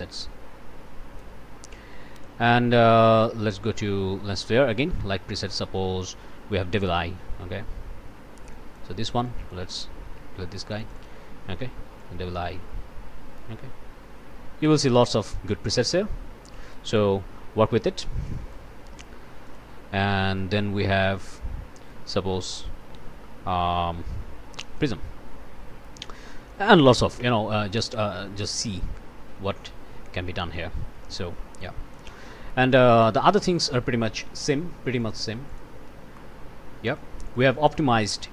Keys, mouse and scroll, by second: 2.1 click, 6.8 click, 8.5 click, 9.2 click, 10.0 Delete, 10.8 click, 12.0-17.6 drag, 18.2 click, 18.6 Delete, 19.2 Return, 19.4 click, 24.8 click, 26.5 click, 27.2 1, 28.4-32.2 drag, 32.9 click, 33.4 click, 35.0 click, 35.5 click, 36.1-36.6 scroll up 1, 37.4-38.2 scroll up 2.